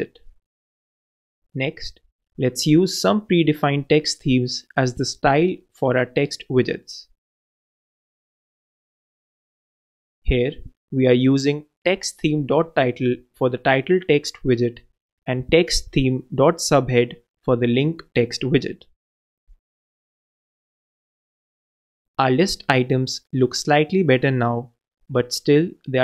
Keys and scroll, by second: 2.8 super+,, 3.4 super+s, 8.4 shift+Return, 8.7 shift+t, 9.1 shift+h, 17.6 super+BackSpace, 18.0 super+s, 20.5 shift+super+c, 21.0 shift+super+Right, 21.2 shift+super+v, 23.7 super+Return, 24.1 super+s.